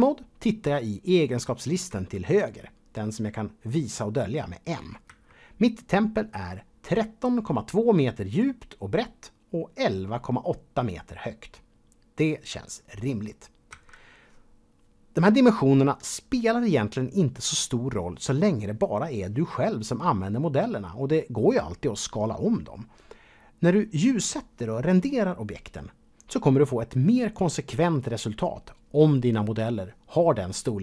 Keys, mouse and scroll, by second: 5.1 n, 14.2 n.